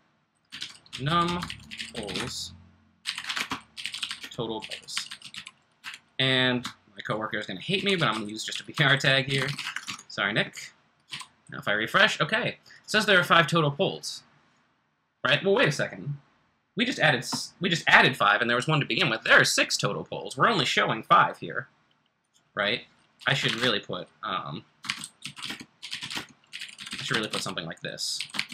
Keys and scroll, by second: 0.0-5.8 typing, 7.5-10.0 typing, 11.1 r, 23.2-28.5 typing.